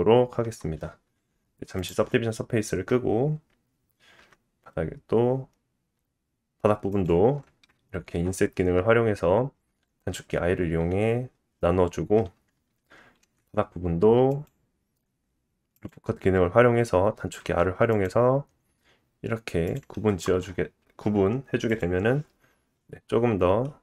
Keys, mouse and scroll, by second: 0.4 Tab, 1.8 click, 4.2 i, 4.8-13.0 middle drag, 13.2 ctrl+r, 17.4 ctrl+r, 20.1 Tab, 21.8 click, 23.6 middle click.